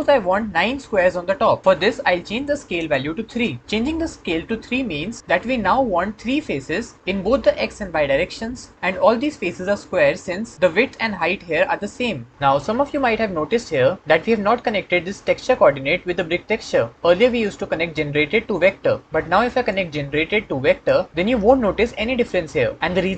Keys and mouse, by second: 2.2 click, 13.0-14.0 middle drag.